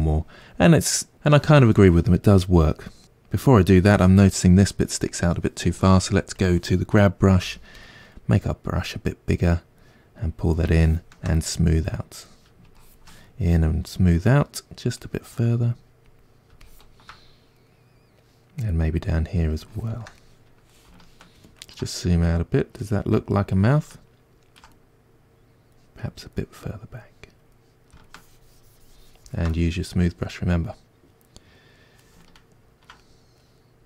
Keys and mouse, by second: 3.0-6.4 middle drag, 6.4-7.5 drag, 7.5 f, 8.9-13.3 drag, 13.3-15.6 middle drag, 15.6-17.7 drag, 17.7-18.8 middle drag, 18.8-20.2 drag, 20.2-25.0 middle drag, 25.0-29.5 drag, 29.5-33.8 middle drag.